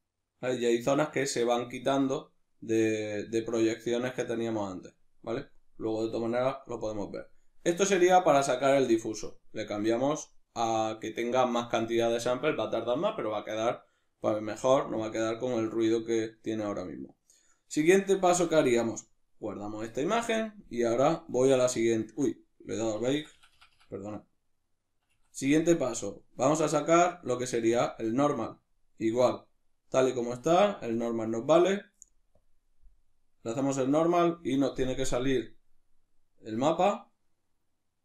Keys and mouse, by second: 3.4-18.4 middle drag, 18.4-38.0 drag, 24.9 Escape.